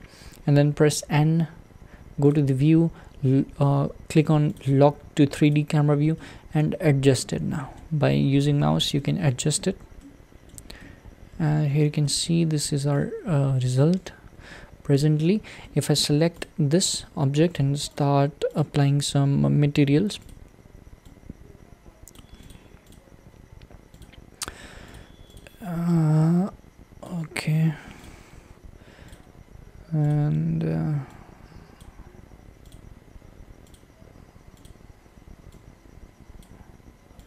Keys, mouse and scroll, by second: 0.9 n, 4.5-6.2 drag, 6.2-6.7 shift+middle drag, 6.7-7.2 scroll down 7, 7.5-8.1 shift+middle drag, 8.1-8.7 scroll down 5, 9.0-16.0 middle drag, 16.5 click, 19.5-21.1 drag, 22.5 click, 23.0 click, 24.1-25.9 drag, 28.0 click, 29.2-31.1 drag, 32.8 click, 33.8-35.5 drag.